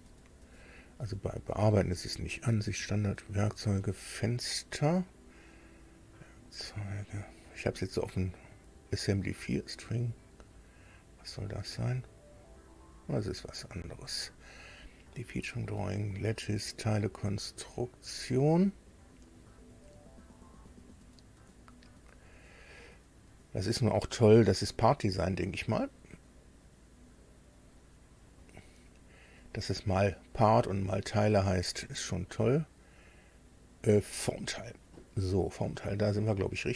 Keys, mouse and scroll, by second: 0.1-0.5 scroll down 2, 0.5 scroll up 2, 1.4 click, 5.1 click, 6.7 click, 11.3 click, 13.8 click, 17.6 click, 20.5-21.2 scroll down 1, 21.8 scroll down 1, 22.4-22.9 scroll up 1, 23.3 scroll up 1, 23.9-24.5 scroll down 1, 25.7-26.1 scroll up 1, 27.4-27.9 scroll down 2, 28.1 scroll up 2, 29.4 click, 34.0 click, 36.6-36.7 scroll down 2.